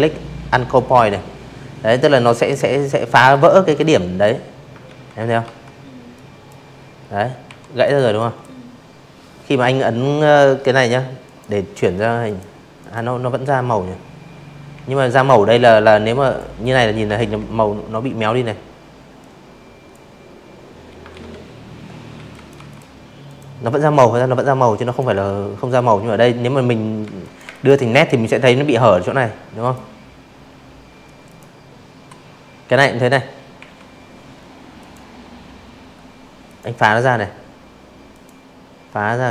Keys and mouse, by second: 0.3 click, 0.7 click, 1.8 ctrl+z, 2.4 v, 3.1-3.4 drag, 4.4 Delete, 4.8 click, 5.2 drag, 8.2 click, 9.3 click, 9.8 click, 11.7 a, 12.1 click, 12.5 click, 14.1 ctrl+z, 16.2 click, 18.1 ctrl+z, 19.1 z, 19.3 click, 19.5 v, 19.6 click, 20.2 click, 21.8 click, 24.0 z, 24.2 click, 24.4 space, 24.5 click, 24.9 v, 26.6 click, 28.2 click, 30.6 a, 31.7 click, 33.4 click, 35.1 click, 36.7 click, 37.4 click, 38.7 click.